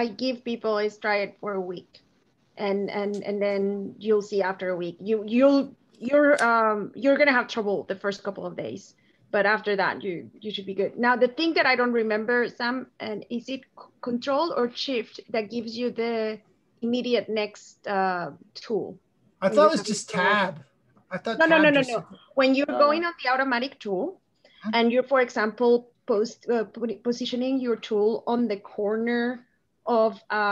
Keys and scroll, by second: 26.0 shift+Tab.